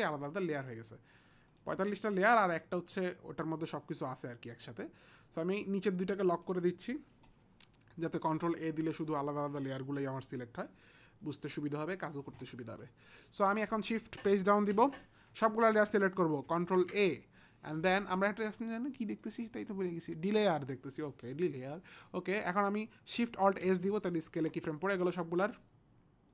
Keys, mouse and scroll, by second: 1.5 click, 2.5 click, 6.0 click, 8.3 click, 14.8 shift+Page_Down, 16.5 ctrl+a, 19.2 click, 23.6 alt+shift+s.